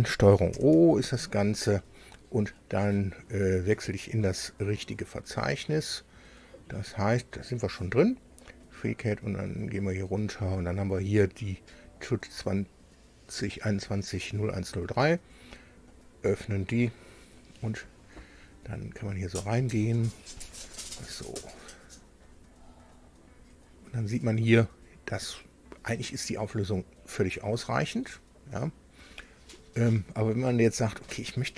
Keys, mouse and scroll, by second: 0.3 ctrl+o, 8.3-10.2 drag, 11.6 click, 15.7 click, 17.3-18.0 scroll up 2, 18.2-18.5 scroll up 2, 19.2-20.2 middle drag, 20.2-22.2 drag, 20.2-22.2 right drag, 22.4-23.2 scroll up 2, 23.4 scroll up 2, 26.2-26.6 scroll down 2, 26.8-27.1 scroll down 2, 27.4 scroll down 2, 29.6-30.0 scroll up 2, 30.2-31.0 scroll up 4.